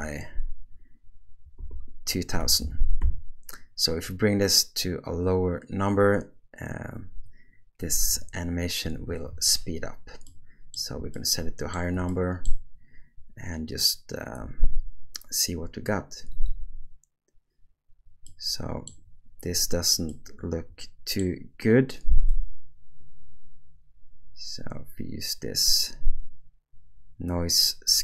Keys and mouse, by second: 2.6 0, 10.3 middle click, 11.1-11.8 shift+middle drag, 12.1 middle click, 14.4 space, 16.3 click, 18.3 middle click, 20.1-21.2 middle drag, 22.3-28.0 drag.